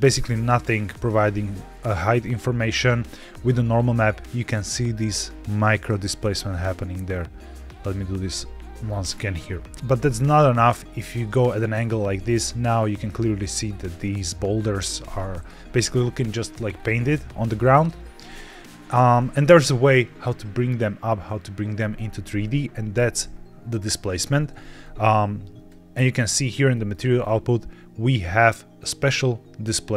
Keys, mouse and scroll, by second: 1.6-2.6 drag, 5.9 click, 7.3-8.2 drag, 9.6 scroll down 2, 9.9-10.6 scroll up 2, 10.6-11.2 middle drag, 11.5-11.8 shift+middle drag, 11.9 scroll up 1, 12.3-12.7 middle drag, 16.6-17.0 scroll down 2, 17.0 middle click, 17.4-18.2 scroll down 3, 18.2 middle click, 18.9 scroll up 2, 19.3 shift+middle click, 24.4 scroll down 2, 24.7 middle click, 25.6 click, 25.6 click, 26.6 middle click, 27.1-27.5 scroll up 2, 28.7-29.9 drag.